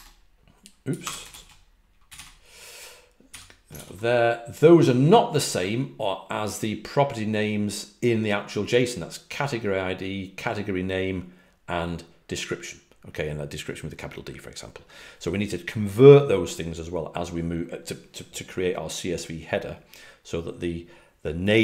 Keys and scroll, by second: 0.0-3.2 typing.